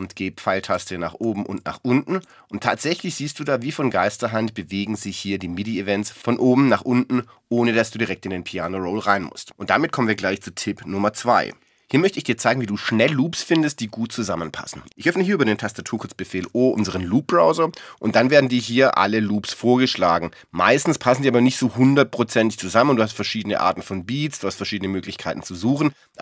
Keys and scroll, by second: 0.7 alt+Down, 2.2 alt+Up, 3.0 alt+Up, 4.8 alt+Up.